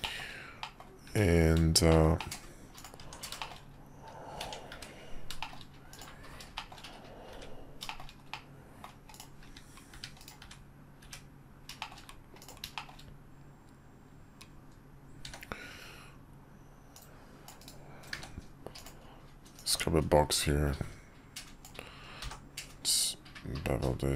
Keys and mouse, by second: 0.0 shift+middle click, 0.6 middle click, 1.9 shift+middle click, 2.2 middle click, 2.8 click, 3.0 Tab, 3.4 shift+middle click, 4.4 Tab, 4.7 `, 5.4 shift+middle drag, 5.9 middle click, 6.6 shift+middle click, 7.3 `, 7.9 shift+middle click, 8.3-8.8 middle drag, 9.1 click, 9.4 `, 10.4 `, 11.0 `, 11.8 shift+middle click, 12.4 click, 12.7 click, 15.2 d, 16.9-17.7 drag, 18.1 d, 19.6-24.1 drag.